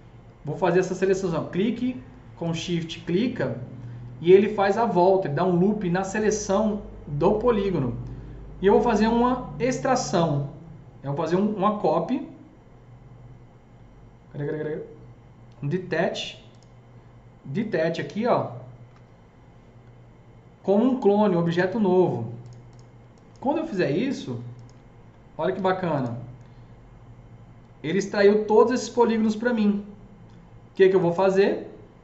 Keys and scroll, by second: 25.4 alt+q.